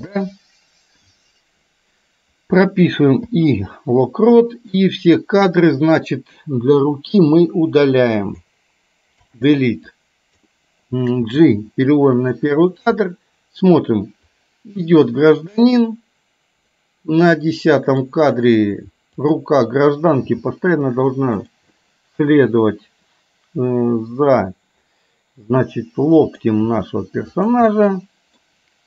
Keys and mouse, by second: 3.2 i, 4.5-5.7 drag, 6.7 Delete, 8.1 click, 9.2 Delete, 10.0 click, 11.4 g, 13.0 click, 14.5-18.2 drag, 19.1 click, 20.4 g, 21.9-26.5 middle drag, 26.7 g, 27.7 middle click.